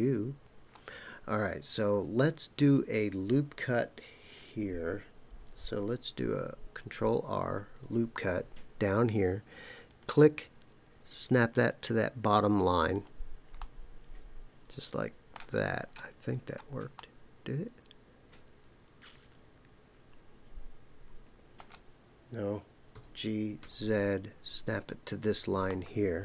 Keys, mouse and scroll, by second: 0.4-1.3 scroll up 1, 7.5 ctrl+r, 12.9 click, 13.6-15.4 middle drag, 15.7-16.9 scroll up 4, 16.9-21.7 middle drag, 22.9 g, 23.6 z, 25.1 click, 25.7-26.2 middle drag.